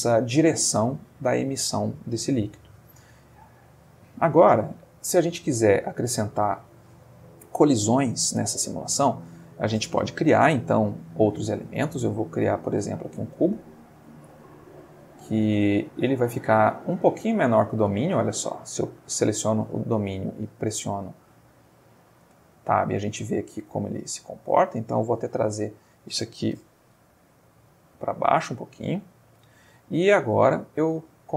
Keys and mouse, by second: 3.2 Escape, 4.9-5.9 middle drag, 8.0-8.9 middle drag, 11.0 shift+a, 12.6 click, 13.5-14.3 middle drag, 14.4-15.5 ctrl+middle drag, 16.2 click, 16.8 Tab, 17.4-18.8 middle drag, 19.8-21.4 middle drag, 21.5-23.4 shift+middle drag, 24.1 Tab, 25.2 click, 26.5 g, 27.0 z, 27.9 click, 28.2-28.9 middle drag, 29.0 middle click, 29.5-30.9 ctrl+shift+middle drag, 31.0 ctrl+shift+middle click.